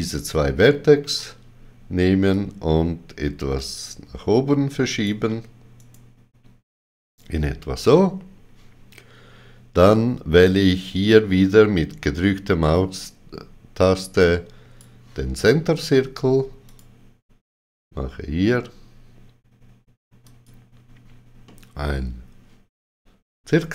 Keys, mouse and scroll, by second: 1.0 g, 2.3 click, 2.3 click, 5.7 right click, 10.4 click, 10.4 right click, 16.6 click, 20.2 click, 21.4 middle click.